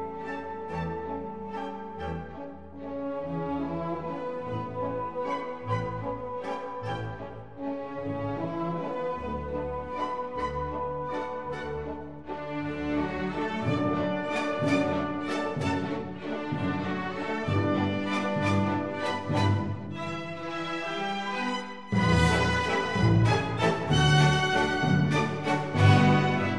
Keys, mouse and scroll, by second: 0.6-2.6 drag, 5.8-12.4 drag, 10.8 x, 15.4-18.2 drag, 18.6-21.1 drag, 20.1 x, 22.2-24.0 drag, 24.0 middle click, 26.2-26.5 middle drag.